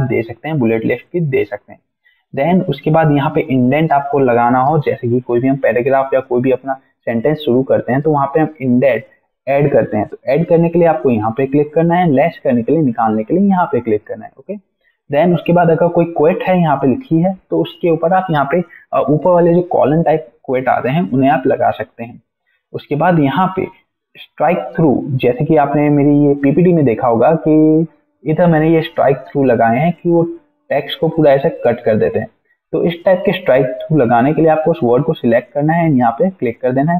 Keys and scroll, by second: 26.5 alt+Tab, 31.7 alt+Tab, 32.6 alt+Tab.